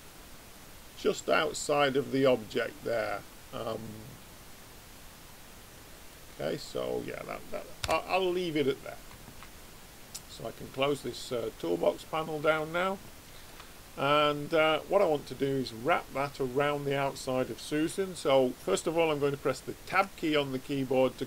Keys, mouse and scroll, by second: 8.2-11.8 middle drag, 11.8 click, 13.0-15.6 middle drag, 13.0 right click, 19.8 Tab.